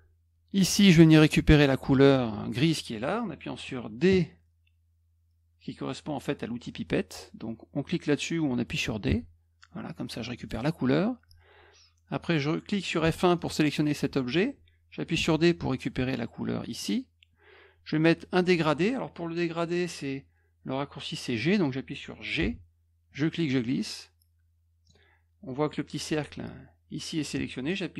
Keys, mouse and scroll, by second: 9.0 d, 10.3 click, 13.0 F1, 13.3 click, 15.1 d, 16.7 click, 22.4 g, 23.1-24.8 drag.